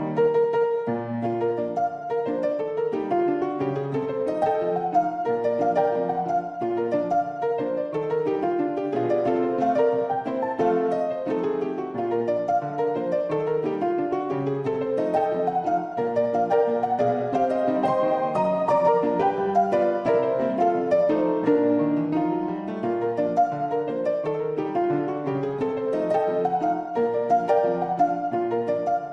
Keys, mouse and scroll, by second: 1.4 shift+click, 2.8 3, 3.1 click, 3.6 `, 4.6 e, 7.1-11.2 middle drag, 12.0 g, 15.6 2, 16.3 click, 16.7 shift+click, 18.2 ctrl+b, 22.8 shift+click, 23.8-26.1 drag, 26.4 click, 28.1 shift+click, 28.4 drag, 28.7 Tab.